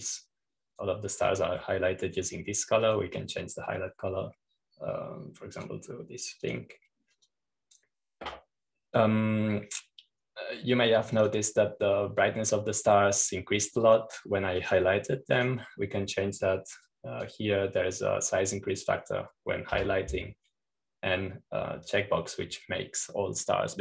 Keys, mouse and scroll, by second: 1.9-3.4 drag, 3.4 middle click, 4.7-5.8 drag, 7.5-10.3 drag, 13.1 click, 15.7 click, 16.5-18.0 drag, 18.7-19.7 drag, 21.6 1.